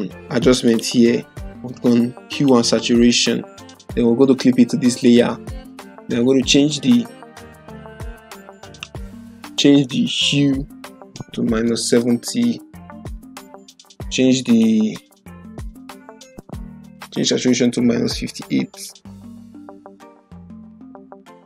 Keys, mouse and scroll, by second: 0.8 click, 5.0 click, 12.4-13.3 typing, 14.4 click, 17.1 BackSpace, 19.8-20.8 typing.